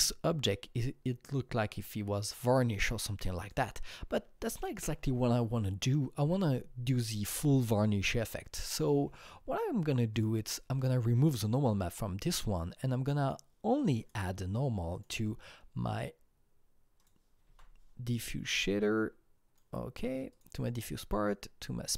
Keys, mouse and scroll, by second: 3.4-5.8 drag, 5.8-7.6 scroll down 2, 8.2 click, 8.7-9.2 scroll down 3, 10.1 click, 13.2 click, 13.2 scroll down 1, 14.0 click, 14.9-17.0 drag, 17.5 alt+Tab, 18.8-21.8 drag, 21.8 click.